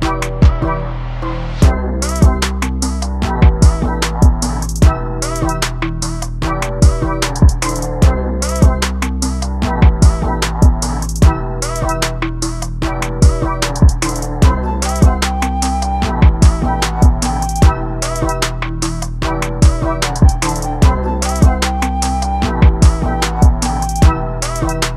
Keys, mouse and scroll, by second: 0.0 ctrl+space, 2.9-3.4 scroll up 7, 3.4 shift+middle click, 3.8 scroll up 1, 4.5-5.6 scroll down 7, 5.6 ctrl+b, 6.0 z, 6.6 alt+a, 6.8-7.4 scroll up 1, 7.4 scroll up 2, 7.5 scroll down 4, 7.7 shift+middle click, 7.8 scroll up 1, 8.1-10.1 shift+middle drag, 10.1 click, 11.3 ctrl+right click, 12.0 scroll down 1, 12.1 shift+middle click, 12.6 click, 13.0 shift+middle click, 13.2 scroll up 4, 13.5 click, 15.4-16.3 scroll down 10, 15.7 shift+middle click, 16.3-17.1 scroll up 7, 16.6 shift+middle click, 16.8 shift+middle click, 17.1 click, 18.8 scroll down 3, 18.9 shift+middle click, 19.1-19.8 scroll up 3, 19.3 shift+middle click, 19.8 click, 20.4 shift+middle click, 20.6-20.9 scroll up 1, 20.9 click, 23.2-23.5 scroll down 1, 23.5 click.